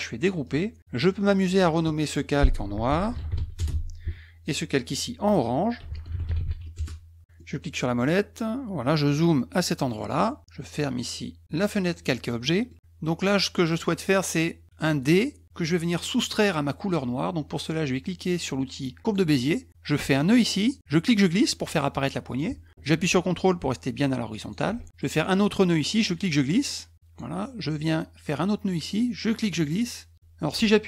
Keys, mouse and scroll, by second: 0.4 click, 1.2 click, 1.3 click, 2.7-3.9 typing, 4.7 click, 4.9 click, 5.5-6.9 typing, 7.4 middle click, 8.9 middle click, 9.2-9.9 scroll up 6, 11.8 click, 12.4 middle click, 19.0 click, 20.8-24.5 drag, 26.0-27.2 drag, 29.2-30.8 drag.